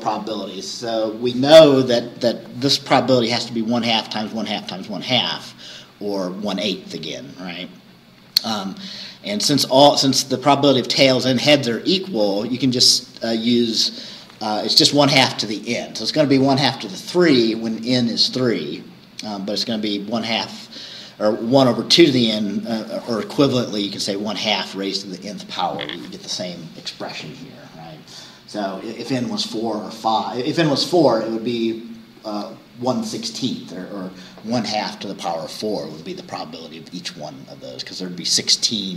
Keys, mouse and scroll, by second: 6.9-7.2 scroll down 2, 9.9 scroll up 2, 11.9-12.3 scroll down 2, 16.4 scroll up 2, 18.4-19.3 scroll down 4, 38.6-38.9 scroll up 2.